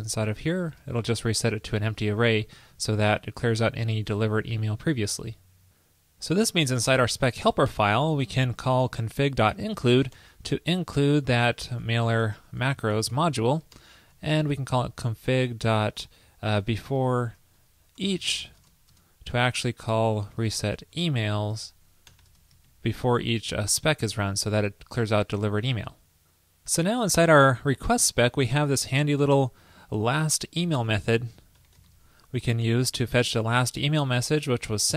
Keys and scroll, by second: 1.7 super+Right, 4.3 super+s, 13.8 super+Return, 22.7 super+Right, 24.6 super+s.